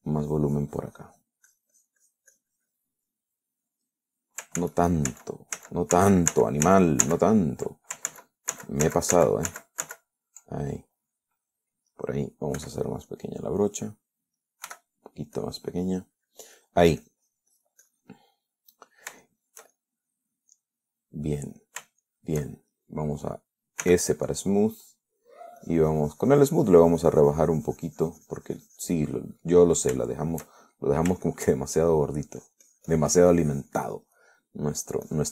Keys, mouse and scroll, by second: 0.3-2.7 drag, 4.3 middle click, 5.9 ctrl+z, 9.3 ctrl+z, 11.9 ctrl+click, 13.8 f, 15.4 click, 15.9 f, 16.2 click, 16.6-19.3 drag, 19.4 middle click, 20.5-21.6 shift+middle drag, 21.8-23.2 middle drag, 23.3-24.4 shift+middle drag, 25.1 s, 25.3 middle click, 25.9 scroll up 1, 26.0 middle click, 26.4-26.8 scroll up 1, 26.8-30.4 drag, 30.4 middle click, 31.2 shift+middle click, 31.9 shift+middle click, 32.5-33.6 shift+middle drag, 33.6-35.1 drag.